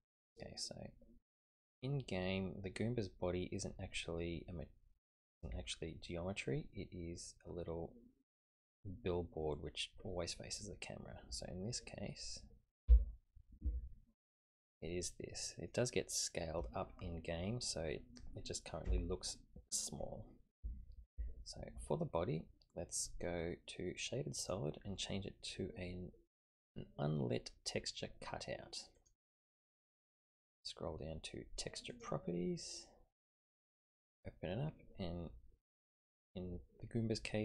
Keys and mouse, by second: 0.1-8.3 middle drag, 12.9 l, 13.6-15.7 middle drag, 24.5-29.1 drag, 31.9 click, 34.1 click.